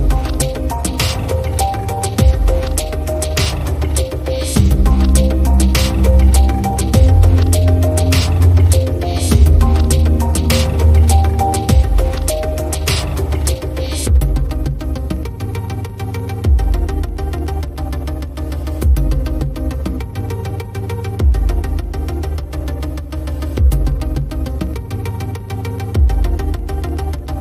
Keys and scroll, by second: 4.2 shift+Right, 9.0 shift+Right.